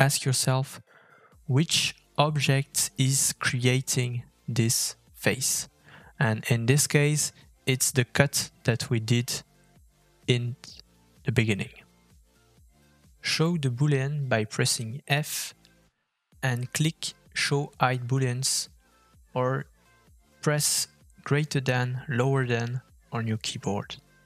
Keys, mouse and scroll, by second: 18.3 click, 19.8 middle click.